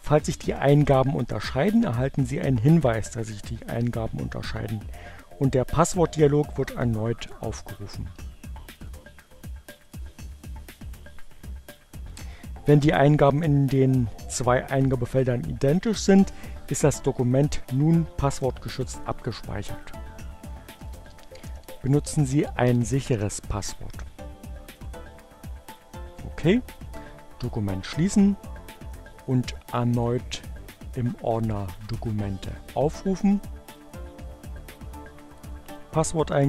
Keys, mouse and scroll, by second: 6.4 1, 8.6 click, 8.8 2, 9.7 click, 11.1 click, 19.1 click, 19.3-22.5 typing, 24.1 click, 28.1 click, 31.7 click, 33.2 click, 34.4 click.